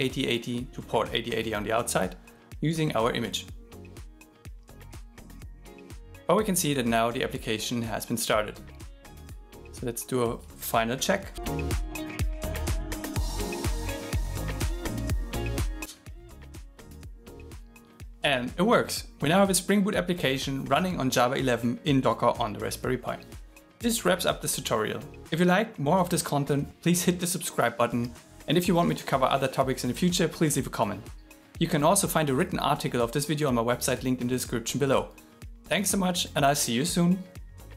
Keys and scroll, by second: 12.0-12.9 typing, 14.3 shift+., 14.9 shift+7.